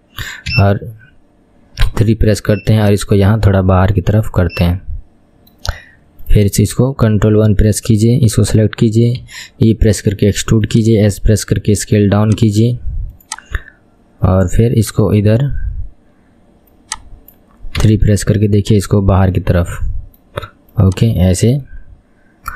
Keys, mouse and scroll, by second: 0.7 KP_1, 2.0 KP_3, 2.9 click, 4.7-6.5 middle drag, 6.5 click, 7.5 ctrl+KP_1, 8.1-9.3 scroll down 2, 9.3 e, 11.3 s, 12.5 s, 14.9 click, 15.5 KP_1, 16.9 click, 17.9 KP_3, 18.7 click, 19.5-20.9 middle drag, 20.9 click, 21.8-22.5 middle drag.